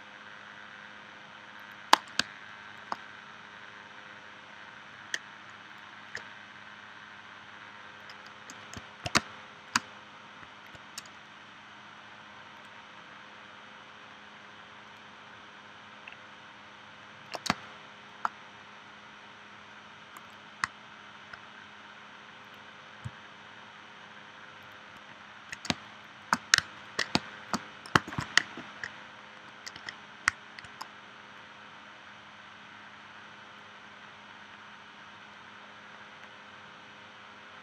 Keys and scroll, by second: 2.2 space, 9.2 space, 17.5 space, 25.7 space, 27.1 space, 28.1 shift+c.